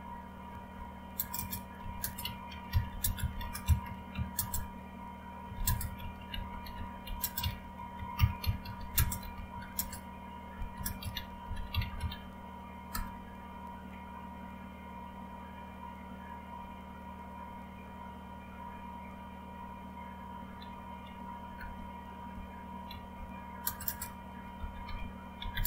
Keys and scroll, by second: 0.0-13.4 typing, 18.9-21.6 typing, 21.6 Return, 22.6-25.6 typing.